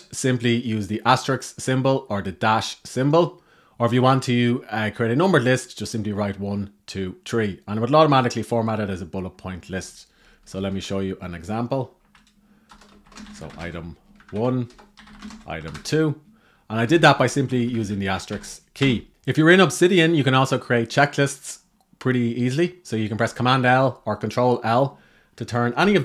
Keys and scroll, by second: 12.8 shift+8, 16.5 Up, 16.7 Up, 17.2 shift+Down, 19.1 Left, 25.5 super+l.